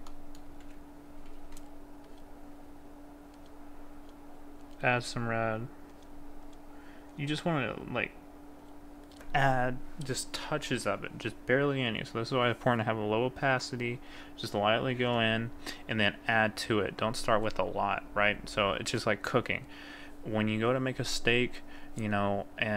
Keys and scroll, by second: 1.3 ctrl+z.